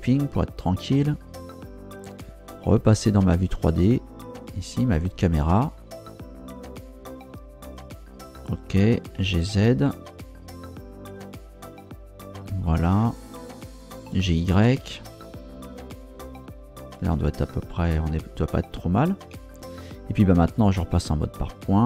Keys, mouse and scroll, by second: 4.1 ctrl+Down, 9.1 g, 9.5 z, 12.3 ctrl+click, 14.1 g, 14.3 y, 17.1 ctrl+shift+click, 19.2 Tab, 21.5 click.